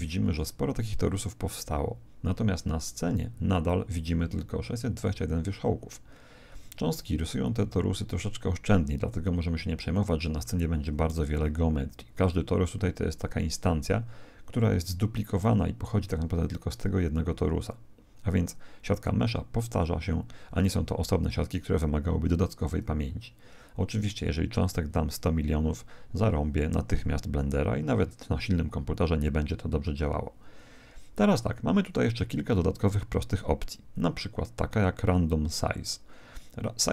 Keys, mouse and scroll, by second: 10.4-12.2 middle drag, 15.3-17.3 middle drag.